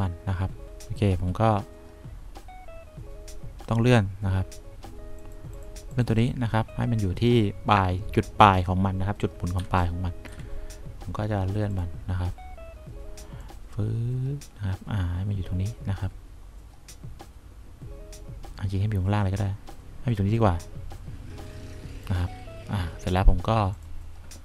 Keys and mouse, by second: 9.9 1, 15.5-19.2 drag.